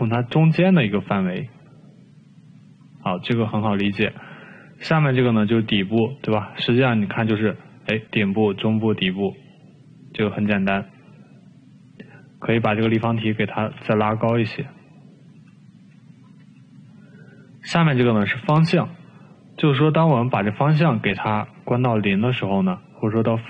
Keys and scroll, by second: 13.3 t, 13.9 t, 14.1 t, 15.5 e.